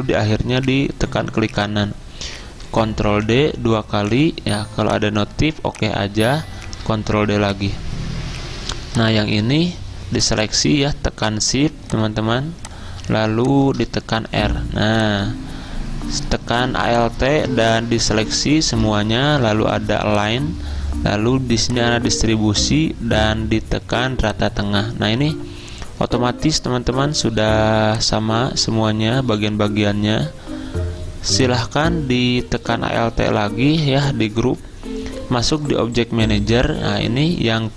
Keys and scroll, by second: 3.4 ctrl+d, 5.9 ctrl+d, 6.7 ctrl+d, 14.4 r.